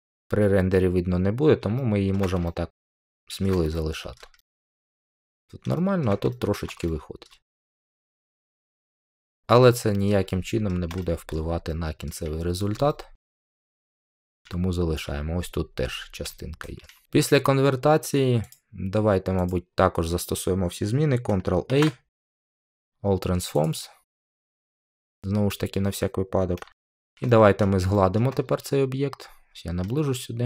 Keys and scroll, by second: 21.6 ctrl+a.